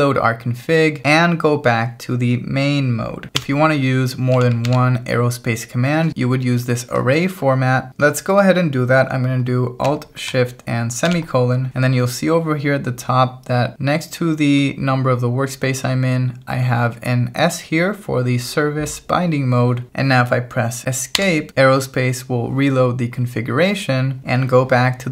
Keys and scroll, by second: 3.4 Escape, 4.3 v, 4.7 shift+4, 11.1 alt+shift+;, 21.2 Escape.